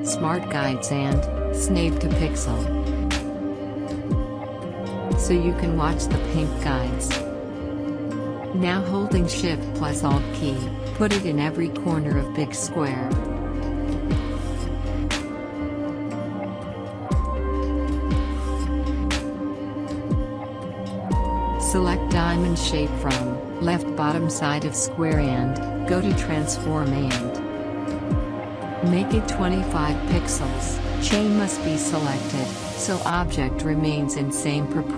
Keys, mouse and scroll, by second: 5.7-12.0 drag, 13.1-13.4 scroll down 1, 13.7 alt+scroll down 1, 14.7-22.9 drag, 25.8-29.0 drag, 32.7 ctrl+a, 33.1-33.6 typing.